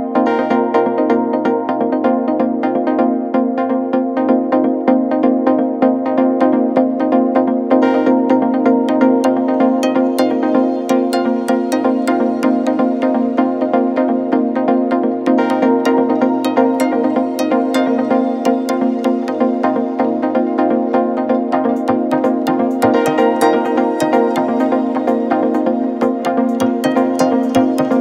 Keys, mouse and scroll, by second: 3.9-6.7 drag, 6.7 s, 9.7-13.4 drag, 13.4 Tab, 15.2 click, 15.9 click, 16.8 KP_3, 17.9 g, 23.1 middle click, 24.0-25.2 scroll down 2, 25.2 ctrl+r.